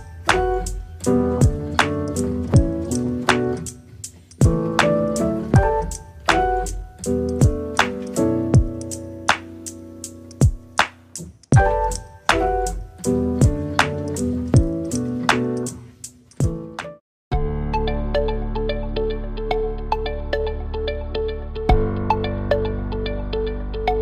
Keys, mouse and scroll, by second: 0.5 click, 1.4 KP_0, 1.8 middle click, 2.2-3.2 scroll down 5, 3.2 click, 4.1 click, 4.6 click, 5.2 KP_0, 6.1-7.3 scroll down 2, 7.3 shift+click, 7.9 click, 8.9-10.6 middle drag, 10.6 click, 11.0 click, 12.2 KP_0, 14.4 ctrl+s, 15.2 click, 15.7-24.0 drag.